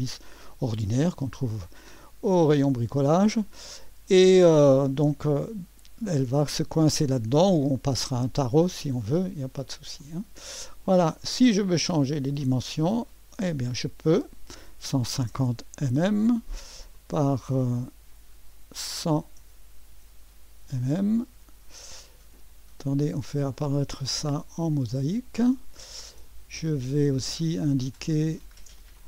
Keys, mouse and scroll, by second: 0.0-2.3 drag, 2.3-2.6 scroll down 1, 3.1-4.6 drag, 5.1 click, 9.3 click, 10.9 click, 12.0 click, 13.3-14.6 drag, 14.3-15.9 typing, 16.9-18.9 drag, 18.9-20.8 typing, 21.3 Return, 23.5-24.8 drag, 23.8 typing, 28.4-28.8 scroll down 1, 28.8-29.0 scroll up 1.